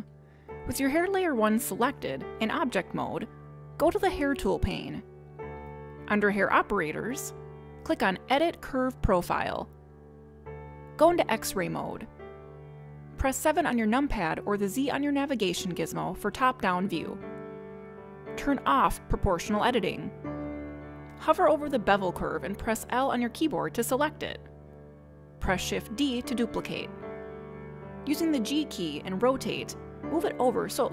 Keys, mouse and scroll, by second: 2.1 click, 5.2 click, 9.6 click, 12.1 click, 14.2 KP_7, 15.3-15.7 scroll down 2, 16.4 scroll down 1, 20.8 click, 22.3 click, 24.4 l, 26.9 shift+d.